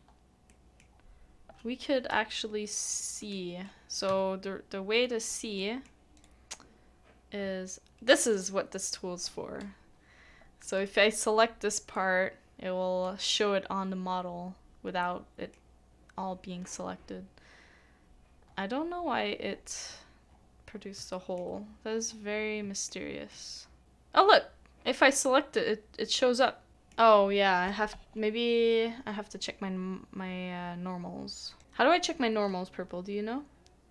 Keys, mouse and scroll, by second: 0.8 scroll down 1, 1.0-2.1 scroll up 1, 3.0 middle click, 4.5 scroll, 4.5 scroll down 1, 4.7 scroll up 1, 4.9 right click, 5.6 middle click, 5.7-6.2 scroll down 1, 11.9-12.6 scroll down 1, 15.0 middle click, 17.6 middle click, 17.8-18.4 scroll down 1, 18.4 scroll up 1, 19.0-19.5 scroll down 1, 19.5-19.8 scroll up 1, 19.8-20.7 scroll down 1, 20.7 scroll up 1, 21.1 shift+middle click, 21.5 scroll up 1, 22.9 shift+middle click, 23.8 shift+click, 26.7 middle click.